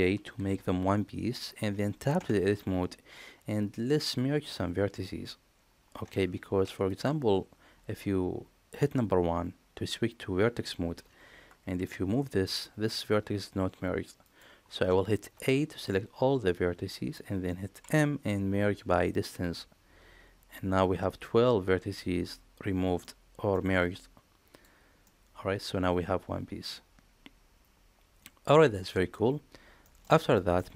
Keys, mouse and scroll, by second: 0.3 ctrl+j, 2.1 Tab, 6.4 1, 11.9 g, 15.1 a, 15.8-17.0 middle drag, 17.8 m, 22.9 middle click, 25.0-29.0 middle drag, 29.8 middle click, 30.1 shift+middle click, 30.5 middle click.